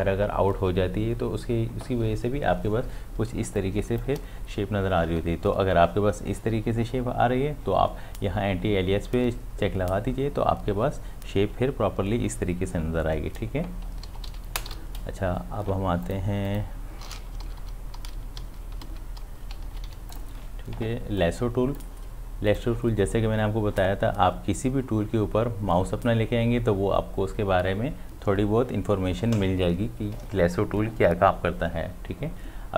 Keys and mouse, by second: 3.3 space, 3.6 click, 3.8 space, 13.9 space, 14.1 d, 14.3 v, 16.1 click, 17.5 ctrl+z, 18.9 ctrl+z, 19.7 ctrl+d, 19.9 v, 20.1 click.